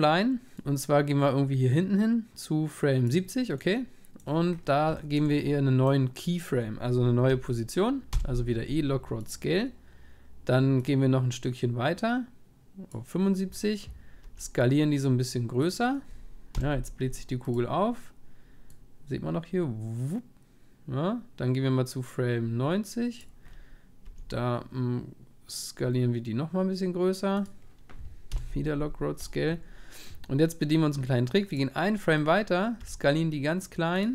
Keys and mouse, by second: 3.8-7.2 middle drag, 13.3 middle click, 14.2 s, 18.9 click, 23.7-26.9 middle drag, 24.1 s, 31.7-33.9 drag, 32.3-34.1 middle drag, 32.8 s.